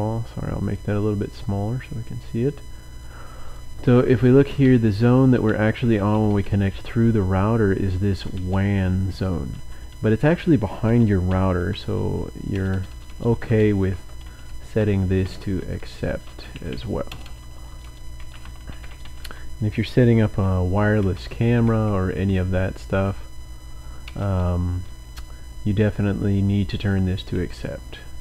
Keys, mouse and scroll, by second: 0.0-0.2 typing, 0.7 click, 2.4 click, 3.4 click, 4.8 Down, 5.2 Down, 5.3 Down, 5.5 Down, 5.6 Down, 5.8 Down, 6.0-6.8 typing, 9.7-22.2 typing, 12.0 Right, 14.0 Caps_Lock, 23.8-24.6 typing, 27.5-28.2 typing.